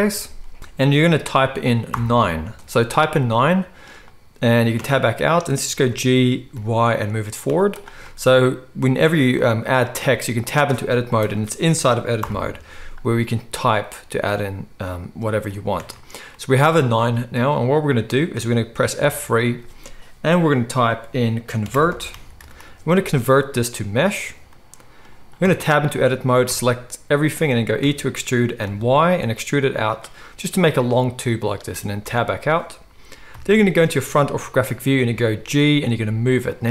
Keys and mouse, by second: 0.0-0.1 typing, 1.9 9, 3.1-32.0 middle drag, 4.8 Tab, 5.9 g, 7.5 z, 10.0 Tab, 11.2 BackSpace, 12.2 9, 15.7 Tab, 19.0 F3, 25.4 Tab, 26.4 a, 27.8 e, 32.0 Tab, 33.3 KP_1, 35.0 g.